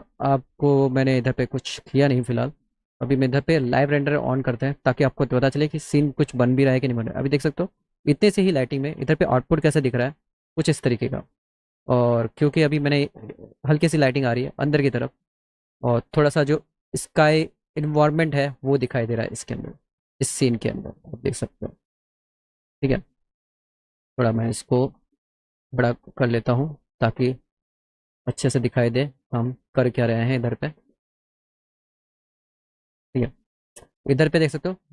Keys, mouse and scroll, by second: 2.9 click, 3.5 right click, 4.5 click, 11.3 click, 12.2 click, 13.8-15.0 drag, 20.4-22.0 drag, 22.9 click, 25.0 click, 27.1 click, 30.2 click, 32.0 middle click.